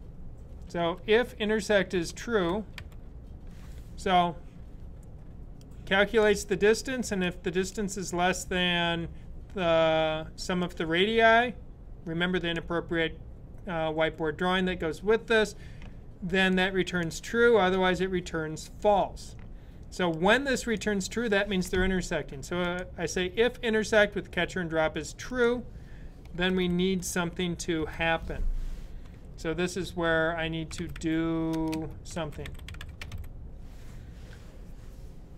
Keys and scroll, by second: 0.3 typing, 1.5-2.9 typing, 26.3 shift+[, 30.3-33.4 typing.